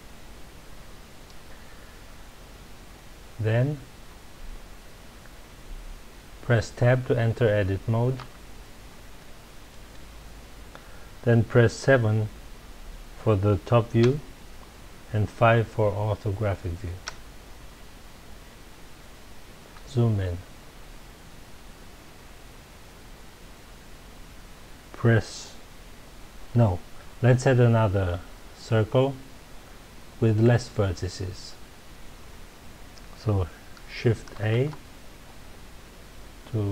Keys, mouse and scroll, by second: 8.2 Tab, 9.2-12.2 middle drag, 14.0 KP_7, 17.0 KP_5, 19.7-20.7 scroll up 2, 20.7-22.8 scroll up 1, 34.4 shift+a.